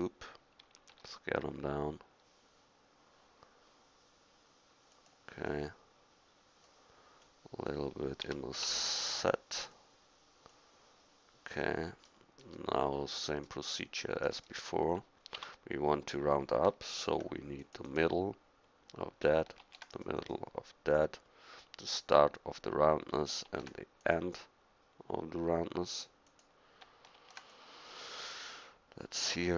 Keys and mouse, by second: 0.9 s, 5.5-9.6 drag, 8.2 s, 10.5-11.6 drag, 11.7-12.3 drag, 15.4 Tab, 17.0 ctrl+r, 19.6 ctrl+r, 23.5 ctrl+r, 27.2 ctrl+r.